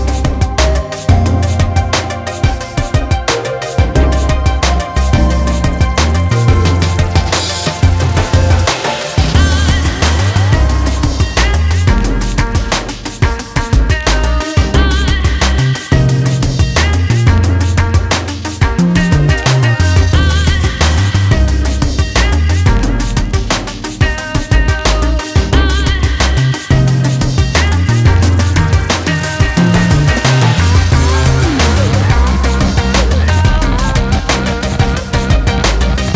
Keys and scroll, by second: 19.4 1, 19.8 0, 20.1 0, 20.7 Return.